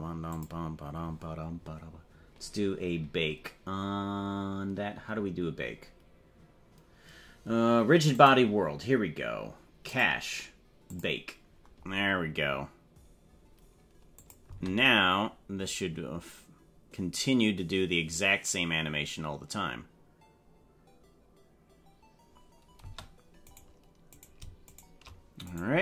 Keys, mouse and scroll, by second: 8.1 click, 9.9 click, 10.9-13.3 drag, 14.3 click, 14.4 space, 22.8 space, 23.4 right click, 24.1 right click, 24.7 shift+right click, 25.5 right click.